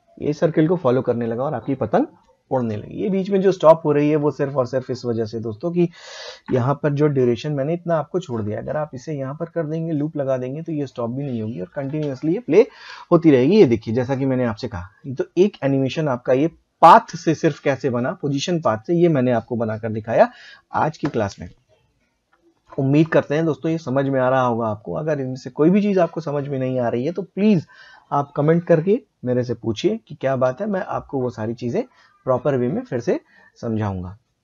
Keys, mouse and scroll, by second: 3.3 space, 4.9 click, 8.3 click, 11.9 space, 30.5 space, 32.9 click.